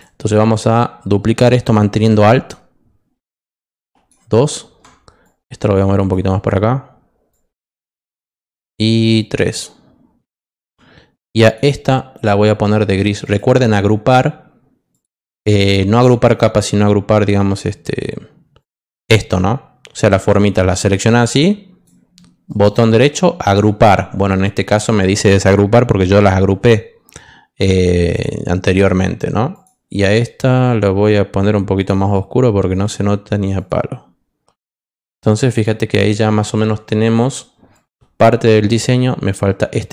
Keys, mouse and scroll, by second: 2.4-4.0 alt+drag, 5.2 click, 7.3 click, 9.1-10.6 alt+drag, 11.4 click, 13.2 click, 14.9 click, 15.6 click, 18.6 click, 20.7-21.8 drag, 22.4 right click, 28.1 click, 29.5 click, 31.7 click, 33.5 click, 34.5 click, 35.5 click, 37.7 click.